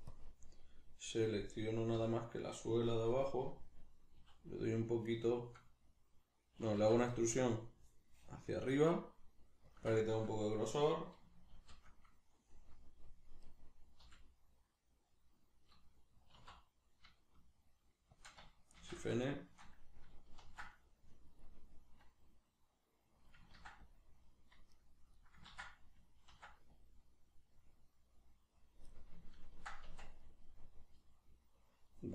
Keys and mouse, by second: 1.2 right click, 2.0 l, 5.2 right click, 6.8 alt+e, 9.8 shift+click, 11.6 shift+l, 13.4 right click, 14.0 l, 18.3 click, 18.8 shift+n, 19.2-23.3 shift+middle drag, 20.4 ctrl+r, 23.3 click, 23.5 ctrl+r, 24.9 right click, 25.2-28.7 middle drag, 25.5 ctrl+z, 26.3 ctrl+r, 28.7 click, 28.9-32.1 middle drag, 29.9 Tab.